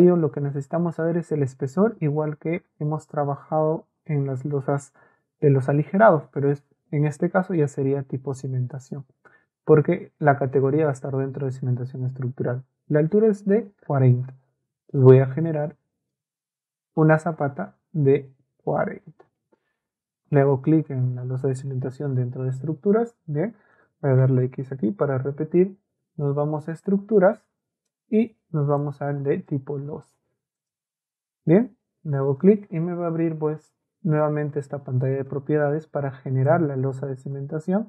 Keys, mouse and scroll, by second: 15.0 middle click, 16.1 scroll up 2, 16.3 middle click, 18.7 middle click, 22.6 Escape, 23.7 click, 26.0 ctrl+a, 33.1 ctrl+a, 34.2-35.3 drag, 36.5 click, 36.9 middle click.